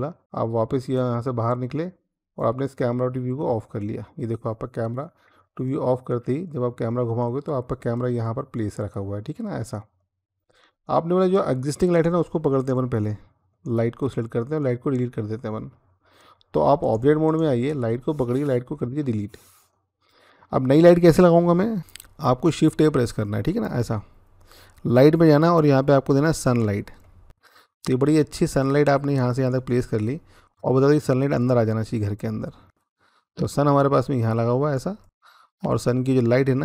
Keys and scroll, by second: 18.6 Delete, 22.5 a.